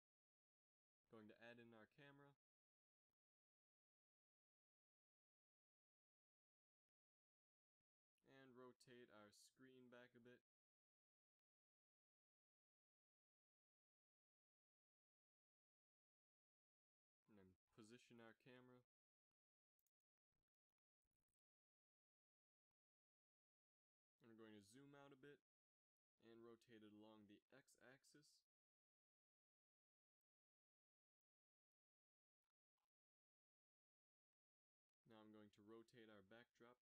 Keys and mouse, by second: 0.3 shift+a, 4.7 KP_3, 5.2 z, 6.5 KP_5, 7.6 r, 9.7 z, 10.7 a, 12.0 shift+z, 14.2 z, 14.4 z, 14.8 ctrl+s, 17.0 ctrl+alt+KP_0, 18.6 g, 19.9 g, 20.9 r, 22.4 g, 25.1 g, 26.2 g, 29.1 g, 30.0 right click, 30.3 r, 32.5 a, 34.9 click, 35.4 g.